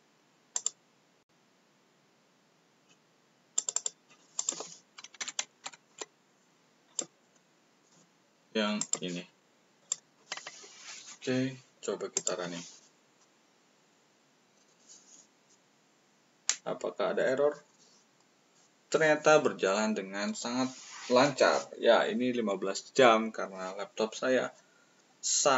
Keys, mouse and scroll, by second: 0.5 click.